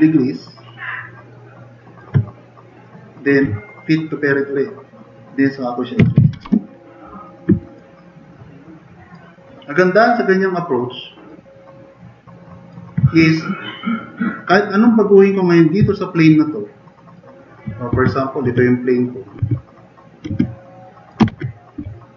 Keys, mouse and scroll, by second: 5.8-7.9 typing, 7.4 middle drag, 8.1-8.7 middle drag, 9.0 middle drag, 10.9-11.6 drag, 11.8-12.6 drag, 15.8-16.2 drag, 16.5 click, 17.9-21.8 typing, 20.6-21.1 drag.